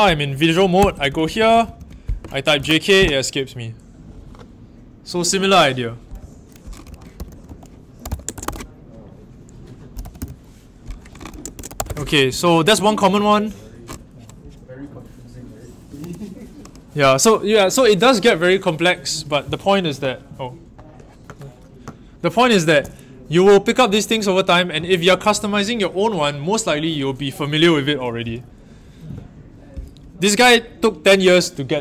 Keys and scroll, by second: 0.0-3.3 typing, 6.1-8.9 typing, 9.9 typing, 11.3-12.7 typing, 15.9 super+w.